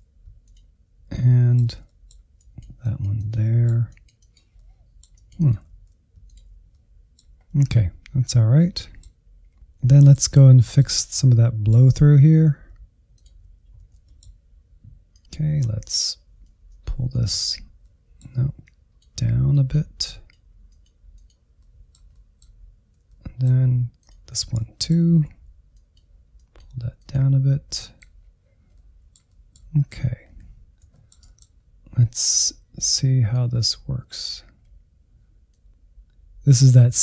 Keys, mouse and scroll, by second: 1.3 alt+z, 2.3 click, 3.2-4.2 drag, 4.6 click, 4.9 middle click, 5.5 click, 5.8 alt+z, 6.1 middle click, 6.3 click, 6.7 middle click, 7.1 scroll down 3, 7.2 middle click, 7.9-8.4 scroll up 3, 8.4 click, 8.7 middle click, 9.0 alt+z, 9.1 scroll down 2, 9.3 middle click, 10.2 alt+z, 10.5-12.2 middle drag, 12.2 alt+z, 13.5 ctrl+click, 13.7 alt+z, 14.0-15.1 middle drag, 15.1 click, 15.2-16.2 scroll up 2, 16.2-17.2 drag, 17.2 ctrl+z, 17.3 middle click, 17.9-20.3 drag, 20.3 middle click, 21.2 alt+z, 21.5 middle click, 22.5 ctrl+Left, 22.7 middle click, 23.1 alt+z, 23.6-25.0 drag, 25.0 scroll down 1, 25.2 middle click, 25.7 scroll down 1, 26.0 middle click, 26.8 Insert, 27.3 Insert, 27.7-28.9 shift+middle drag, 28.9 click, 29.8 middle click, 30.5-31.4 scroll up 3, 31.4-37.0 drag.